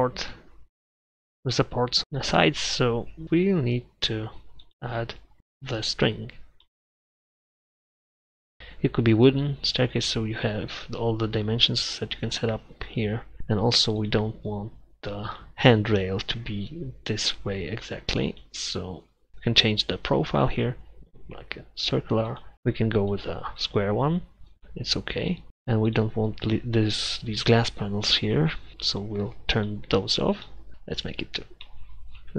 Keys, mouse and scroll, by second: 4.9 middle click, 8.6-9.4 middle drag, 24.2-26.8 middle drag, 24.2 scroll up 1, 30.6-31.1 middle drag, 31.1 KP_Divide, 31.9-32.3 middle drag.